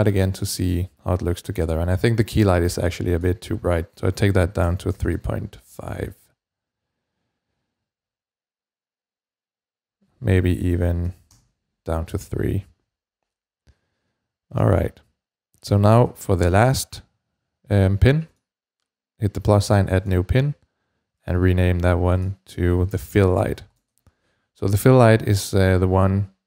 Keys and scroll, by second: 4.2-5.4 typing, 10.9 3, 11.1 Return, 13.3 typing, 22.7-23.9 typing, 25.8 typing.